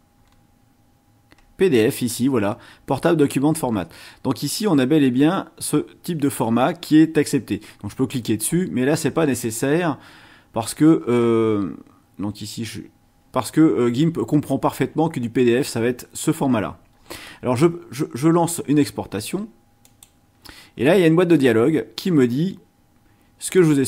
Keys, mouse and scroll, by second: 11.7-12.8 scroll down 6, 19.8 click, 23.5-23.8 drag.